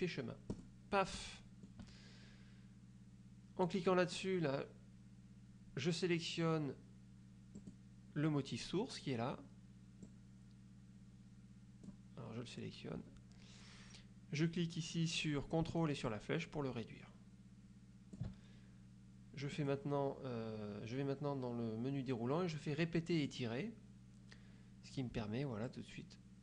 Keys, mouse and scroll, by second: 0.6 click, 1.3 middle click, 4.0 middle click, 7.7 click, 10.2-12.2 drag, 16.2-18.4 ctrl+drag, 19.6 click, 23.3 click, 25.8-26.4 ctrl+drag.